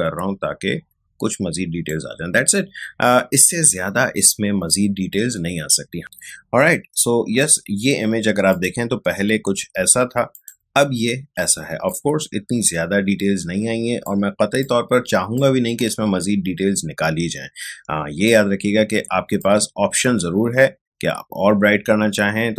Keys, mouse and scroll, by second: 8.5 click, 12.0 ctrl+space, 14.6 ctrl+click, 14.7 ctrl+space, 18.2-22.5 drag.